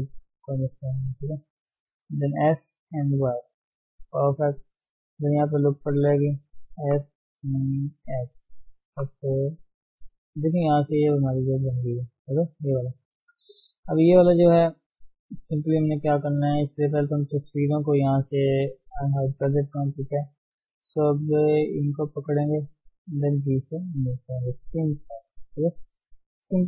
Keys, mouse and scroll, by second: 0.5 click, 1.4 shift+z, 2.3 s, 5.3 ctrl+r, 6.8 s, 8.9 g, 9.8 Tab, 10.1-10.6 scroll down 3, 10.6-13.5 middle drag, 13.5 scroll up 1, 13.6 middle click, 14.1 scroll down 1, 14.2 Tab, 14.8 scroll up 1, 15.0-16.6 middle drag, 16.6 Tab, 18.2 click, 18.6 Tab, 18.8 middle click, 19.3 KP_7, 19.6 scroll up 1, 20.1 shift+middle click, 20.5 shift+z, 22.2 click, 22.4 shift+z, 22.7 shift+middle click, 23.4 g, 25.3 click, 25.4 g, 26.1 scroll down 3, 26.4 Tab.